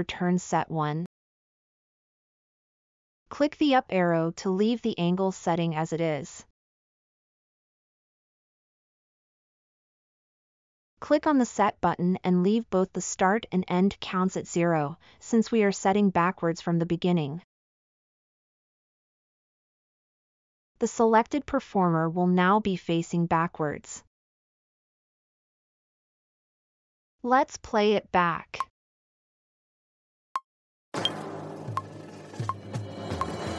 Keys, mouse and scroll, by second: 16.0-17.7 drag, 16.0-17.7 middle drag, 16.0-17.7 right drag, 17.7 scroll up 2, 17.7 middle click, 17.7 scroll, 19.0 middle click, 19.8 scroll down 2, 19.9 scroll up 2.